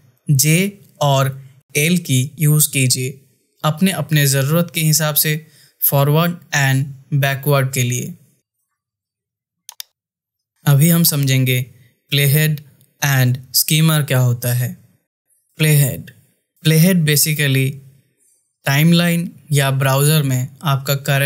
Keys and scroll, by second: 1.7 l.